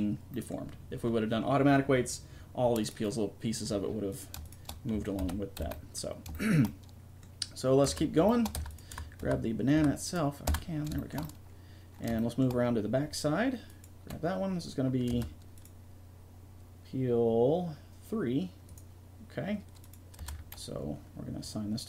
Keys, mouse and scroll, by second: 4.5-5.7 right drag, 5.2 alt+r, 5.6 a, 7.9 Tab, 8.6 Tab, 8.7 right click, 9.2 Tab, 9.8 Tab, 9.9 right click, 10.5 Tab, 15.1 Tab, 18.8-19.8 right drag, 20.2 Tab, 20.4-21.8 drag.